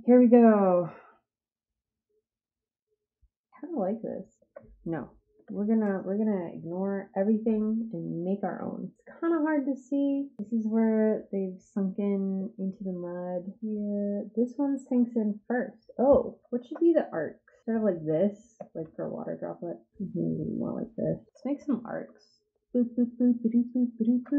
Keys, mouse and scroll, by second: 3.5 click, 5.3 Delete, 6.9 click, 13.1 click, 16.5 ctrl+z, 17.6 click, 18.8 ctrl+z, 19.9 click, 21.1-22.0 typing.